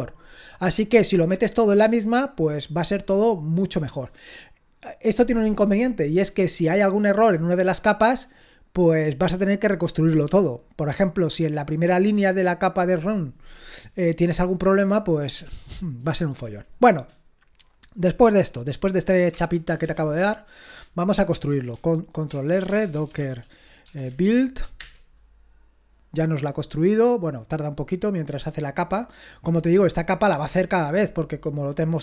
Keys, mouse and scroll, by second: 19.5-20.6 typing, 22.4 ctrl+r, 22.4-24.7 typing, 24.8 Return.